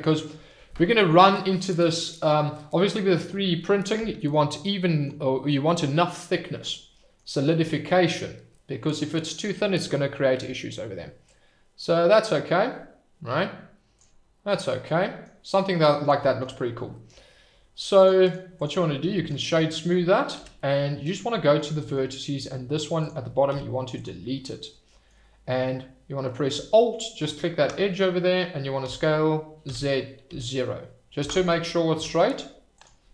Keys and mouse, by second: 3.9-4.3 middle drag, 6.9 middle click, 11.4-13.9 drag, 14.5-15.2 middle drag, 15.4-15.9 middle drag, 17.9 click, 18.3 right click, 19.4 middle drag, 20.3 Tab, 21.7 middle click, 23.0 click, 23.5 x, 24.7 middle click, 27.2 alt+click, 28.8 s, 29.6 z, 30.2 0, 31.2 Return, 31.9 Tab.